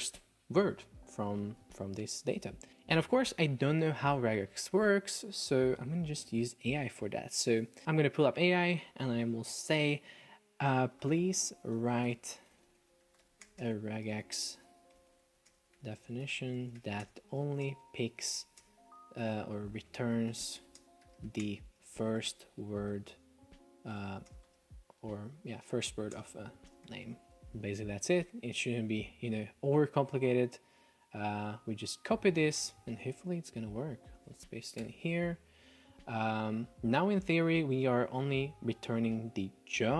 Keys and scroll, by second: 7.8 F1, 11.6 space, 12.5 Delete, 13.5 space, 15.0 Delete, 15.5 space, 16.8 space, 19.3 Delete, 20.8 space, 24.0 BackSpace, 24.3 space, 26.2 space, 32.7 F1, 34.4 super+v, 34.9 Return.